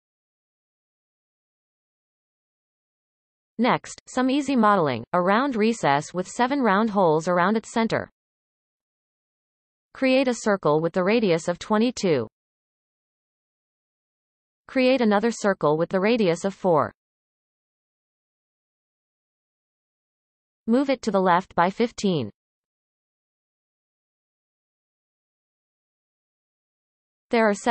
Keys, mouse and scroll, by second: 1.6-2.4 scroll down 2, 2.4 Tab, 9.2 shift+a, 11.1 click, 11.8 2, 14.2 shift+a, 19.5-22.6 drag, 23.7 g.